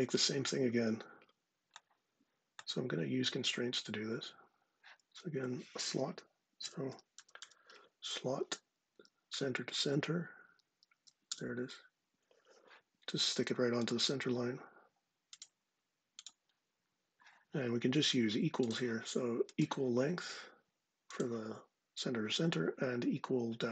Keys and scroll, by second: 6.0-7.8 typing, 8.6 Down, 10.1 Down, 10.9 Return.